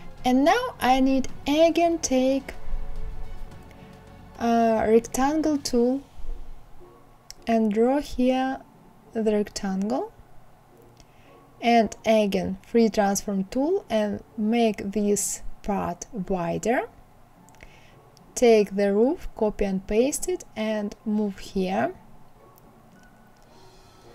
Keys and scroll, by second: 18.2 ctrl+c, 18.5 ctrl+v.